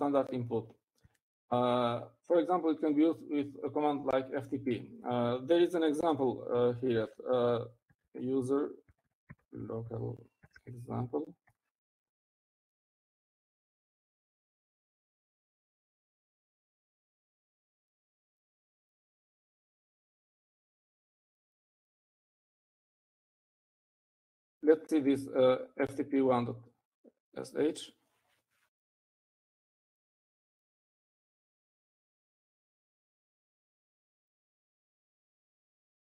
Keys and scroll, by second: 8.4-14.0 typing, 14.4 Up, 16.4-18.2 typing, 18.7 ctrl+d, 19.0 ctrl+d, 19.5-21.9 typing, 23.0 typing, 24.1-24.9 typing, 30.1-33.5 typing, 34.6-35.4 typing.